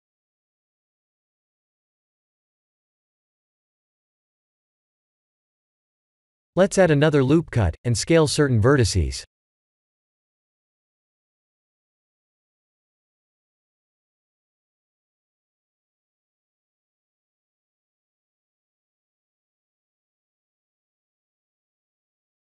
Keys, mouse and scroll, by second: 0.1 3, 0.4 click, 1.3 2, 1.7 click, 6.0 middle click, 6.8 Tab, 7.1 middle click, 8.7 middle click, 8.8 Tab, 10.9 ctrl+r, 13.2 middle click, 13.7 middle click, 14.4 middle click, 15.0 s, 16.3 ctrl+z, 16.7 middle click, 17.3 middle click, 17.9 click, 18.9 ctrl+click, 19.4 middle click, 19.5 middle click, 20.3 middle click, 20.9 shift+click, 21.6 ctrl+click, 22.1 shift+click.